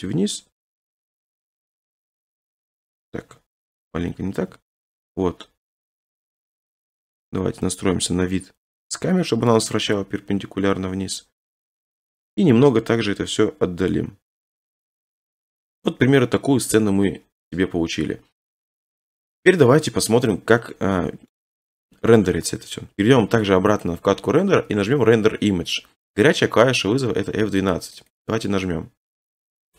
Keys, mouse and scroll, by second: 1.2 click, 1.5 7, 3.2 3, 3.8 ctrl+z, 4.4 3, 4.8 middle click, 5.9 middle click, 6.3 shift+middle click, 6.4 scroll up 6, 7.3-7.6 scroll up 3, 7.6-8.3 scroll, 9.5 scroll, 9.9 r, 12.1 click, 12.4-12.7 scroll, 12.7 g, 15.4-17.5 drag, 21.4 middle click, 23.8 click, 28.2 click.